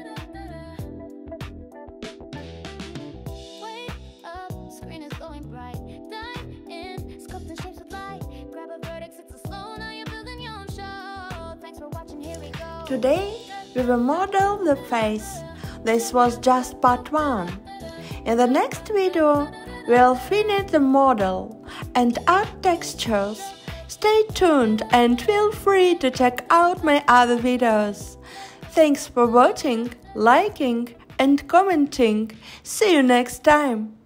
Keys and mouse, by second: 0.3 f, 0.9 click, 2.3 f, 6.8 click, 7.4 shift+click, 11.5 s, 12.0 y, 12.5 o, 13.0 click, 16.6 click, 18.1 click, 18.4 click, 24.3 Tab.